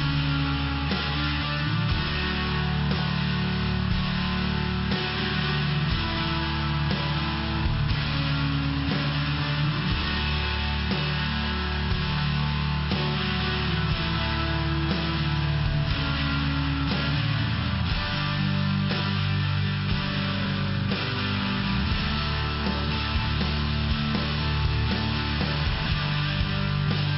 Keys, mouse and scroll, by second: 0.4 click, 1.4 click, 1.5 click, 1.9 click, 2.0 click, 2.4 click, 2.8 click, 3.4 click, 3.9 click, 4.5 click, 5.0 click, 5.2 click, 5.5 click, 5.6 double click, 5.8 double click, 6.3 double click, 6.9 click, 9.2 click, 10.4 click, 10.5 click, 10.9 click, 11.5 click, 12.1 click, 12.5 click, 12.9 click, 13.0 double click, 13.5 double click, 14.0 double click, 14.4 click, 15.1 click, 17.7 click, 25.5 click, 26.8 click.